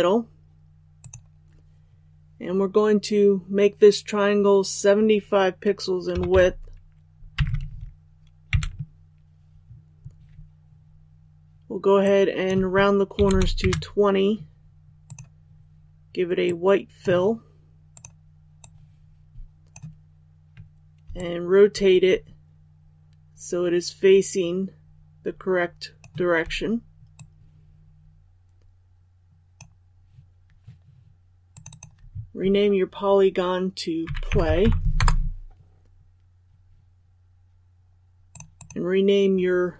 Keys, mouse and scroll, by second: 7.3 Tab, 12.0-19.8 drag, 21.1-26.0 shift+drag, 27.1-29.8 drag, 35.0 Return, 38.3 click.